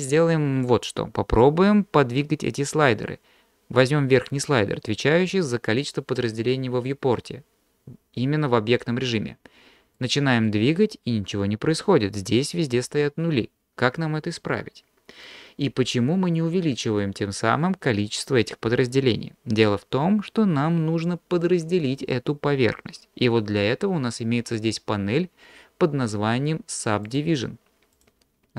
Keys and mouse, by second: 10.0 click, 10.5 click, 27.1 click, 28.0 click.